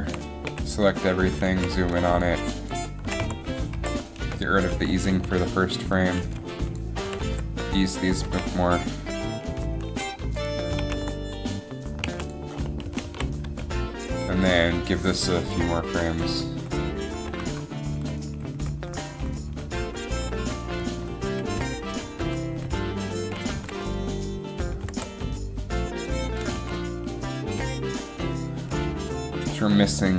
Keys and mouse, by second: 0.1 a, 0.6 KP_Decimal, 1.7 a, 2.0 b, 3.1 s, 7.3 s, 10.9 alt+a, 12.2 alt+a, 13.1 a, 13.3 a, 13.6 b, 16.1 Right, 16.3 Right, 16.5 Right, 16.7 Right, 17.3 Left, 17.6 Down, 18.1 Right, 18.4 Right, 18.7 Right, 19.0 Right, 19.3 Right, 19.6 Right, 20.0 Right, 20.3 Right, 20.5 Right, 20.9 Right, 21.1 Right, 21.4 Right, 21.7 Right, 22.1 Right, 22.4 Right, 22.7 Right, 24.9 g, 26.7 a.